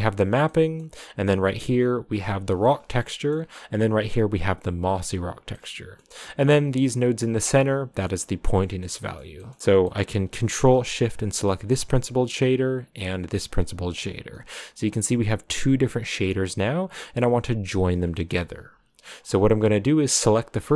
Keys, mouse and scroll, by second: 0.7 middle click, 1.5 click, 3.1 click, 3.2 middle click, 3.8-4.1 scroll up 3, 4.1 click, 6.0 middle click, 6.5-7.0 scroll up 2, 7.3 click, 8.5 scroll down 2, 9.0-11.7 middle drag, 11.7 ctrl+shift+click, 13.4 ctrl+shift+click, 14.7 ctrl+shift+click, 16.2 ctrl+shift+click, 18.6 a, 19.1 scroll down 1, 19.7-20.3 scroll down 1, 20.3 click.